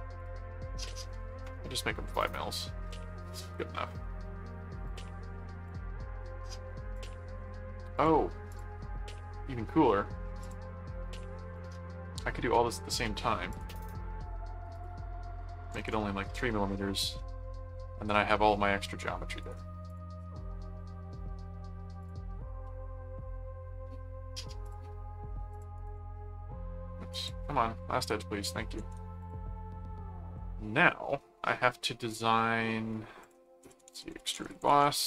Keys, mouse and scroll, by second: 0.1 click, 2.6 middle click, 4.2 middle click, 4.8 click, 5.7 click, 6.0 middle click, 6.9 click, 7.9 click, 10.4 click, 11.5 click, 13.5 click, 14.7 click, 17.2 middle click, 18.1 middle click, 19.4 right click, 19.9 click, 22.0 click, 22.6 middle click, 24.6 click, 25.5 click, 25.7 right click, 27.1 click, 27.9 right click, 28.8 ctrl+7, 29.2 click, 29.5 middle click, 30.3-31.7 middle drag, 32.4 middle click, 33.2 click, 33.4-35.0 typing.